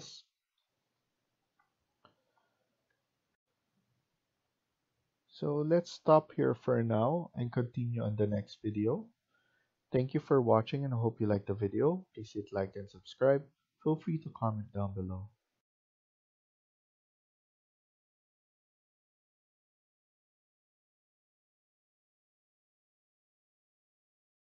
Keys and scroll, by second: 3.2 F1.